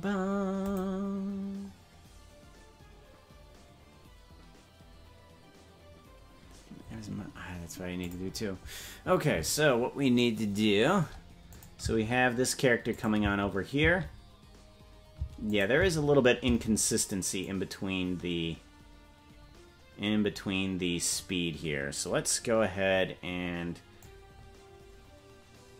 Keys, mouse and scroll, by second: 11.6 click, 11.8 space, 12.9 click, 13.2 space, 14.3 space, 15.2 space, 15.5 click, 15.8 space, 16.4 space, 17.4-21.2 drag, 24.0-25.7 drag.